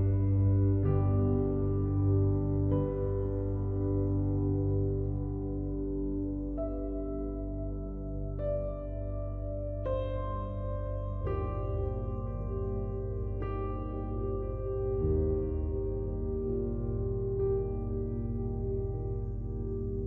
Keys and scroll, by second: 11.6 ctrl+i, 17.6 ctrl+j, 18.1 ctrl+t.